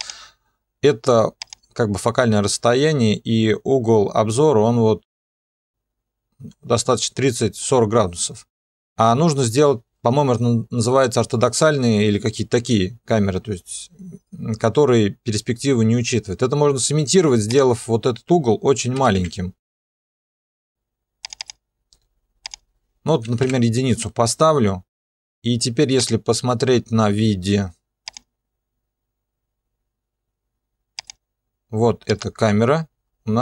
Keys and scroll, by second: 19.0 0, 19.2 Return, 23.2 1, 23.4 Return.